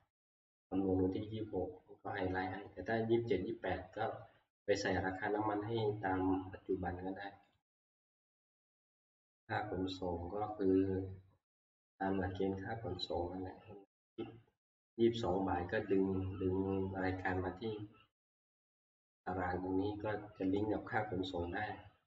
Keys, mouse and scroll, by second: 7.6 click, 8.6 click, 10.5-10.9 scroll, 11.8 click, 13.1 click, 16.0 click, 19.3 click, 19.6-20.0 scroll.